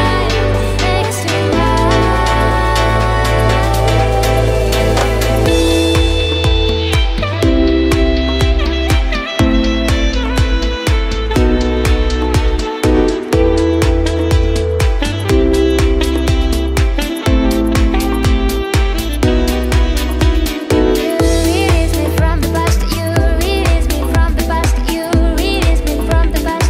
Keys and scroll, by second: 0.4-3.4 typing, 6.8 space, 7.5 space, 14.9-17.7 typing, 20.9 a.